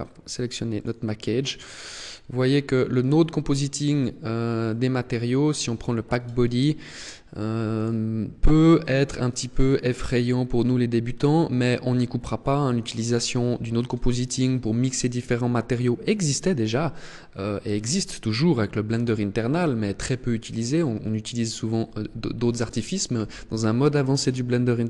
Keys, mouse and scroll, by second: 0.7 click, 1.8 click, 2.9 click, 5.4 click, 7.7 click.